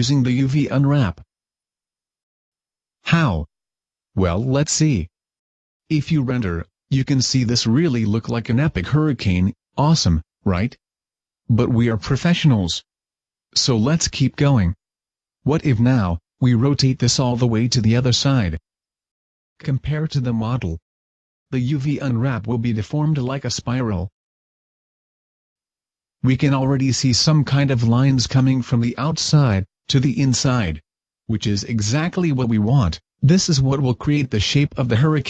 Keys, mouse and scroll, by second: 5.5 u, 8.0 F12, 8.0-11.3 scroll down 2, 11.3 right click, 13.2 r, 19.6 click, 19.6 r, 21.2 click, 21.2 r, 22.0 click, 22.0 r, 22.6 click, 22.6 r, 25.8 F12, 25.8-28.0 scroll up 1.